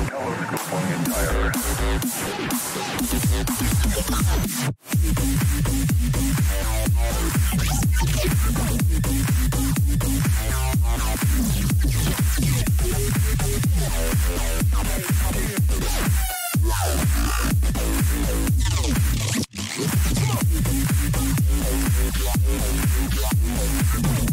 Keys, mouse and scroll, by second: 3.2 a, 3.6 a, 4.0-6.3 middle drag, 7.6 ctrl+z, 8.9 ctrl+z, 9.4 ctrl+z, 9.9 ctrl+z, 10.6 ctrl+z, 11.5 a, 12.0-13.6 middle drag, 13.2 Tab, 18.3-20.6 middle drag, 20.6 Tab, 21.2-24.3 middle drag.